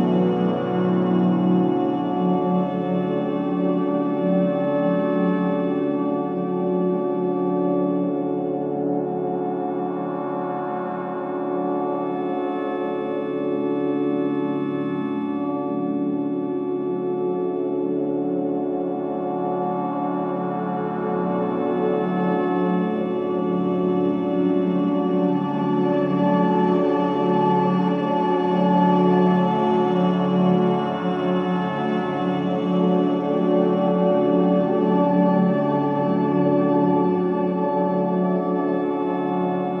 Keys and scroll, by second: 3.4 3, 3.6 ], 5.2 ], 6.1 4, 10.8 3, 11.4 ], 13.1 4, 14.6 3, 15.0 ], 16.0 ], 21.6 4, 24.5 3, 25.0 ], 25.5 ], 26.4 4, 29.6 F9, 34.0 9, 34.2 Return, 34.9 ,, 36.2 2, 38.7 Return, 39.4 Delete.